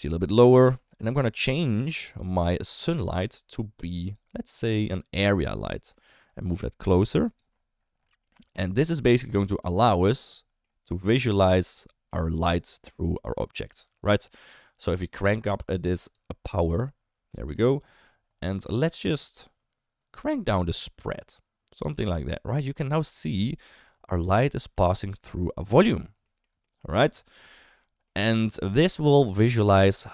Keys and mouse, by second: 0.8 shift+middle drag, 1.4 click, 2.0 middle drag, 2.4 shift+middle drag, 4.0 click, 5.1 click, 6.0 shift+middle click, 6.5 g, 8.0 middle click, 8.5 g, 8.9 middle click, 9.6 g, 10.1-10.5 middle drag, 10.8 g, 11.6 middle click, 12.3 middle click, 13.1 middle click, 13.7 r, 14.4 middle click, 16.2-17.5 drag, 17.8 middle click, 18.5 shift+middle click, 20.5-23.0 drag, 23.8 middle click, 24.4 shift+middle click, 24.9 middle click, 25.6 middle click, 26.2 shift+middle click, 26.6 middle click, 27.1 shift+middle click, 28.0 middle click, 28.7 shift+middle click, 29.4 KP_1, 29.8 KP_3.